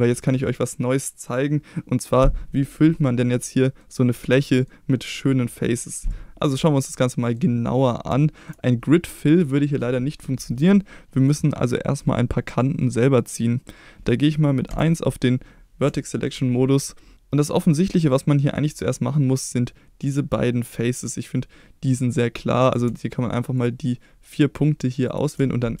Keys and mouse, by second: 2.8-3.8 middle drag, 4.4 middle click, 6.6 middle click, 8.2 shift+middle click, 14.7 1, 16.0 shift+middle click, 22.7 click, 24.3 shift+click.